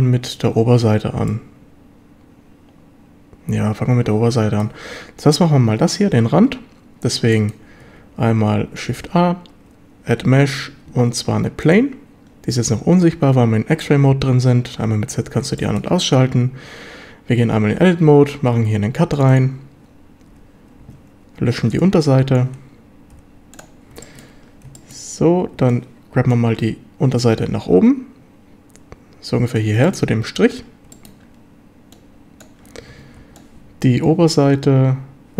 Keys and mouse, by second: 1.3-4.6 shift+middle drag, 7.3 shift+middle drag, 9.0 shift+a, 12.3 z, 13.9 z, 15.1 z, 15.6 shift+drag, 17.4 Tab, 18.5 ctrl+r, 19.3 click, 20.3 1, 20.8 a, 21.7 b, 23.1 x, 24.0 shift+middle drag, 24.8 shift+middle drag, 25.5 b, 27.2-29.6 drag, 29.8 shift+click, 30.0 middle drag, 30.9 shift+click, 31.1 shift+middle click, 32.0 click, 32.9 a, 33.2 b.